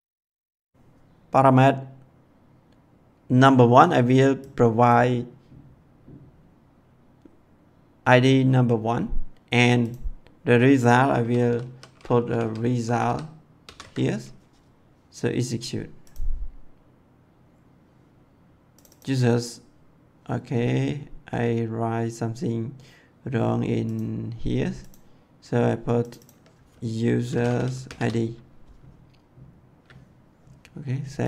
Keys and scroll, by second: 11.4-13.5 typing, 26.9-28.3 typing.